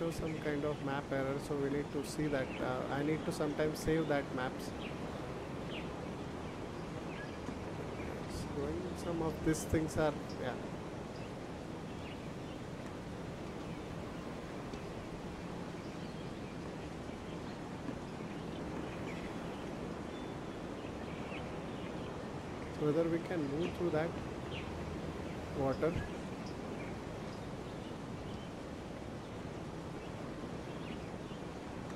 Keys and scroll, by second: 21.1 space.